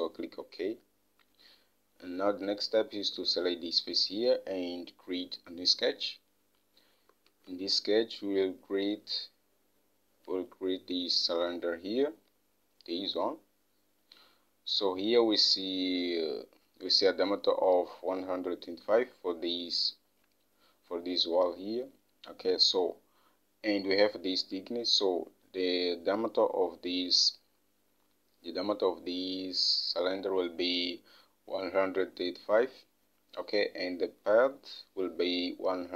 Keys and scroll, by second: 7.7 alt+Tab.